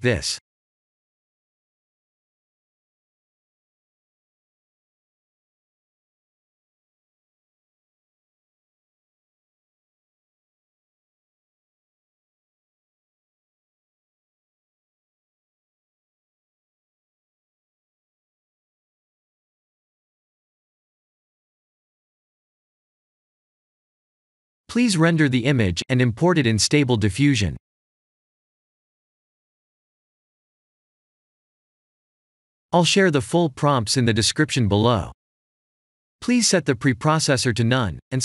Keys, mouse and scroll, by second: 1.1 s, 2.7 s, 7.3 click.